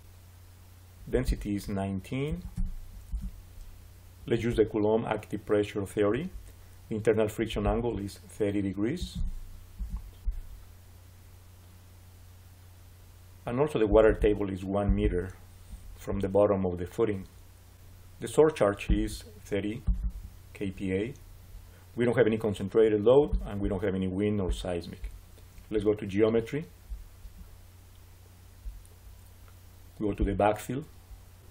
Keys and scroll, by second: 2.2 1, 2.4 9, 3.0 Return, 8.6-9.5 typing, 9.6 Return, 15.8 Return, 21.4 3.